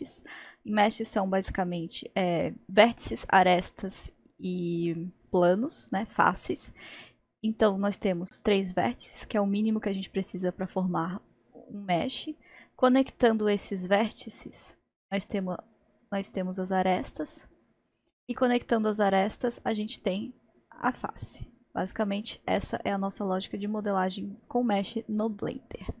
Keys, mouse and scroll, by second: 12.8-18.6 drag, 20.2-26.0 drag.